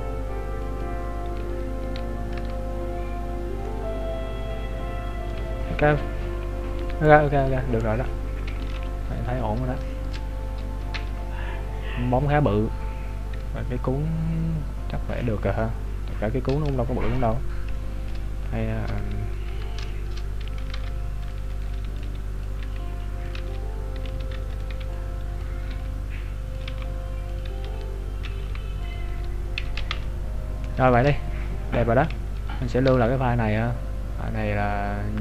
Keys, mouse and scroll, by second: 3.3-3.7 scroll down 2, 3.7 middle click, 5.5-6.6 scroll down 11, 6.6-7.2 scroll up 5, 7.4-8.3 scroll down 4, 8.6 KP_Decimal, 9.4-10.0 scroll up 2, 10.0 shift+middle click, 10.5 scroll down 1, 11.0 KP_3, 11.9 scroll down 3, 12.8 scroll up 1, 13.9-14.2 scroll up 6, 14.6 scroll up 4, 15.0-15.5 scroll down 6, 15.5 scroll up 1, 15.8 scroll down 1, 16.8 shift+middle click, 17.7 shift+middle click, 18.8-20.7 scroll up 7, 19.6 Tab, 20.7 ctrl+Tab, 20.7 shift+middle click, 21.5 right click, 21.7 b, 22.7 s, 23.4 ctrl+z, 24.1 z, 24.5 right click, 24.7 b, 25.8-29.1 typing, 27.8-28.1 scroll down 2, 30.0 Tab, 30.2-30.9 scroll down 6, 30.9 shift+middle click, 31.2-31.5 scroll up 1, 32.9 scroll up 6.